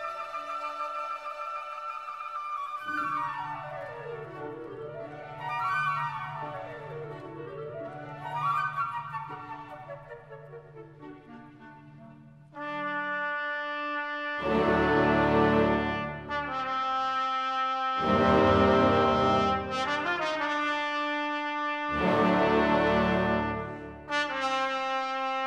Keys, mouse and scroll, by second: 0.0 alt+click, 0.2 space, 0.2-0.7 scroll up 2, 0.3 click, 0.9 w, 1.0 click, 1.2 right click, 1.3 click, 1.3 Delete, 1.4 click, 2.0 Return, 2.1 w, 2.2 scroll down 1, 2.4 click, 2.8 scroll down 1, 2.9 click, 3.3 right click, 3.4 click, 3.7 shift+right click, 3.8 click, 4.0 right click, 4.1 scroll down 1, 4.2 alt+click, 4.7 click, 4.8 alt+click, 5.2 right click, 5.2 alt+scroll down 1, 5.4 alt+click, 5.5 shift+right click, 5.6 click, 5.8-9.6 typing, 6.0 right click, 6.2 click, 6.3 right click, 6.5 click, 7.0 click, 7.8 click, 8.1 alt+click, 8.1 right click, 8.2 right click, 8.4 click, 8.5 scroll up 1, 8.8 alt+click, 9.1 right click, 9.2 click, 9.5 right click, 9.8 right click, 10.0 scroll up 1, 10.2 right click, 10.2 scroll down 1, 10.3 scroll up 1, 10.6 right click, 10.8-13.9 typing, 10.9 shift+click, 11.1-11.4 scroll up 2, 11.2 right click, 11.5 click, 11.8 scroll down 1, 12.0 right click, 12.1 click, 12.4 click, 12.6 right click, 12.7 click, 12.9 Delete, 13.0 click, 13.8 click, 14.5 Delete, 14.6 click, 14.9 scroll down 1, 15.0 click, 16.4 click, 16.6-17.2 typing, 16.8 alt+click, 16.9 right click, 17.0 alt+click, 17.4 click, 17.7 alt+scroll up 1, 17.8 click, 18.1-18.4 alt+scroll down 2, 18.2 click, 18.4 right click, 18.5 click, 18.6 Delete, 18.7 click, 18.8 Delete, 18.9 click, 19.0 Delete, 19.0 click, 19.2 scroll up 1, 19.4 click, 19.5-21.9 typing, 19.6 click, 20.0 click, 20.1 right click, 20.3 click, 20.7 scroll down 1, 20.8 click, 21.0 click, 22.0 alt+click, 22.9 right click, 23.0-24.8 typing, 23.0 right click, 23.2 click, 23.4 right click, 23.4 click, 23.6 right click, 24.0 click, 24.3 click, 24.5 middle click, 24.6 scroll up 1, 24.9 scroll down 1, 25.0 right click, 25.1 click.